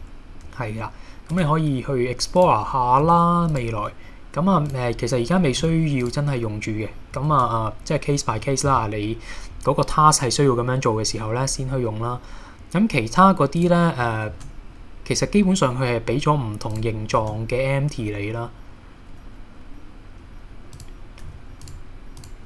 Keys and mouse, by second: 1.3 Tab, 2.4 click, 3.0 x, 5.6 x, 7.3 shift+a, 14.3 shift+a, 21.2 g, 21.6 click.